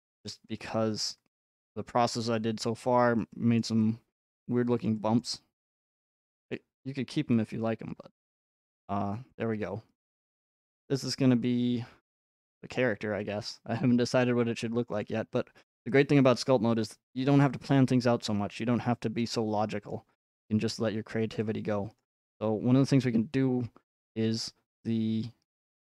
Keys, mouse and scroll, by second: 3.2 click, 4.9 click, 6.0 click, 7.1-15.0 middle click, 7.9 click, 8.3-9.4 scroll, 11.0-11.3 scroll, 12.8 scroll, 13.8-14.4 scroll, 15.5-16.0 scroll, 19.9-20.8 scroll, 20.8-21.3 scroll, 21.9-22.4 scroll, 23.0 scroll.